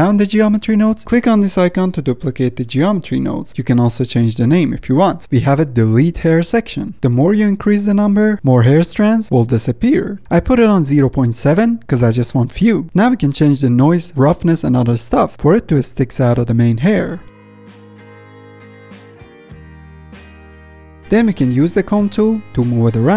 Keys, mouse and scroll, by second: 2.8-5.2 drag, 7.8 click, 9.0-12.3 drag, 12.5 scroll down 3, 13.1 middle click, 13.8-15.1 scroll up 5, 14.2 middle click, 15.1-17.1 drag, 17.1-18.5 middle drag, 18.5-20.6 drag, 20.6-21.2 middle drag, 21.2 click, 21.4 middle drag, 21.7 ctrl+Tab, 22.0 middle click, 22.1 z, 22.5 f, 22.8 middle click, 23.0-23.1 drag.